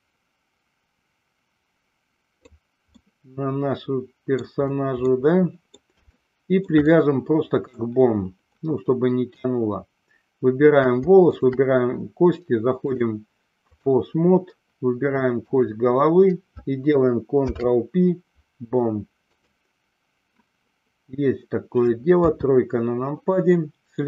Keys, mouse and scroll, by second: 3.1-4.7 middle drag, 5.2-6.0 middle drag, 6.3-7.0 shift+middle drag, 7.1-8.1 middle drag, 11.5 shift+click, 13.1-14.3 drag, 17.6 ctrl+p, 22.3 KP_3.